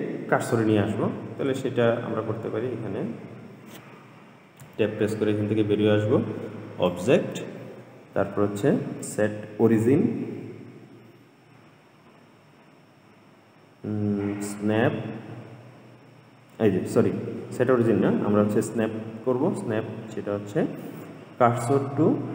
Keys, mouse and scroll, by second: 4.9 Tab, 7.1-10.2 drag.